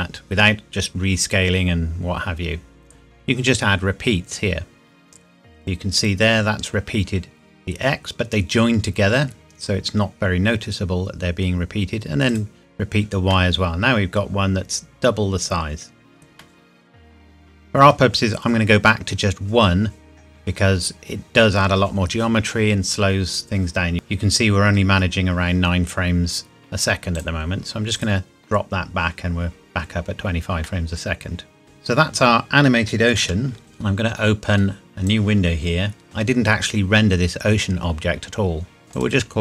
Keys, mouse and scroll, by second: 2.1-3.9 scroll down 1, 3.9 scroll up 1, 5.6 click, 12.3 click, 12.5 click, 13.3 middle click, 15.4 scroll up 1, 16.4 middle click, 27.2 click, 30.0 scroll down 1, 30.7 middle click, 31.6 click, 33.2 ctrl+s, 33.8 click, 38.8 click.